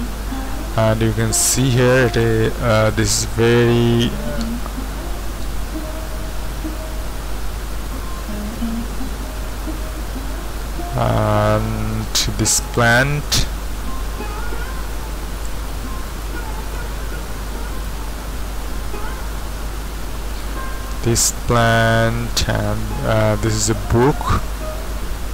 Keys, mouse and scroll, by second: 0.8 z, 1.4 click, 2.8-4.2 drag, 4.4 z, 5.4 g, 7.5 Escape, 9.2 a, 12.1 z, 13.4-14.5 typing, 14.9-16.4 middle drag, 16.5-17.0 scroll up 1, 18.1 middle click, 18.2-18.6 scroll down 1, 18.4-19.8 typing, 20.5-23.5 middle drag, 23.5 z, 23.9 right click, 24.4 Tab.